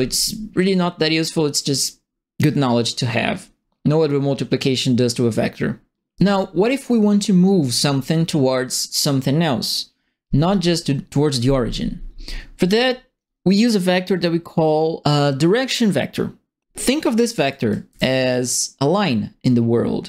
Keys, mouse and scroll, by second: 17.4-18.4 typing, 17.5-18.5 right drag.